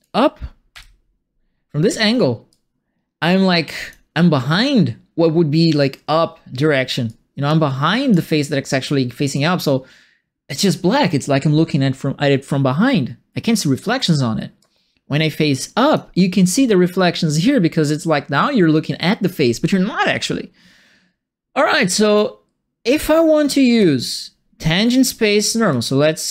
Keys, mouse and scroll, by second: 0.7 p, 2.5-3.9 drag, 7.0 click, 7.9 click, 9.3-10.5 drag, 14.5-15.9 drag, 21.9 right click, 23.7 click, 24.7 click, 25.7 click.